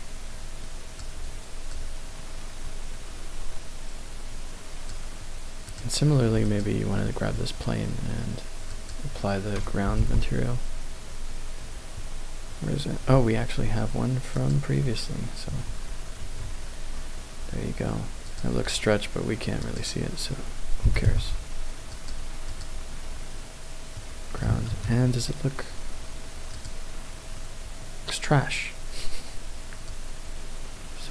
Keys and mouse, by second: 1.7-4.9 drag, 6.5 click, 8.7-14.7 drag, 15.5 Tab, 16.3 Tab, 18.3 click, 19.6 click, 20.9 g, 21.1 y, 22.0 click, 22.5 click, 24.0 middle click, 24.7 KP_0, 26.5 click, 30.0-31.1 drag.